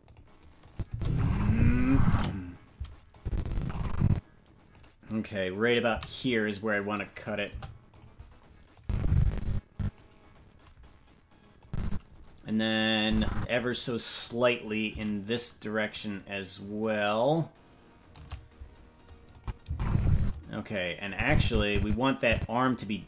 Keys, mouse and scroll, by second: 0.7 click, 0.9 space, 2.1 space, 3.1-4.8 drag, 5.9 i, 7.1 right click, 7.5 Delete, 8.8-10.0 drag, 11.6 click, 13.0 click, 14.6-18.2 drag, 19.3 click, 19.7 space, 20.2 space, 21.1-22.7 drag.